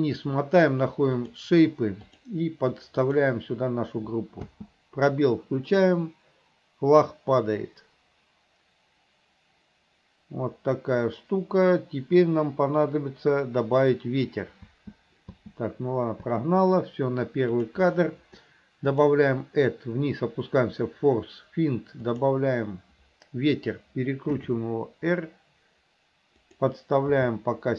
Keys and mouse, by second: 2.3-3.4 drag, 4.6 space, 14.8 space, 15.4 space, 16.4 space, 17.7 click, 19.1-22.4 drag, 24.5 r, 27.3 g.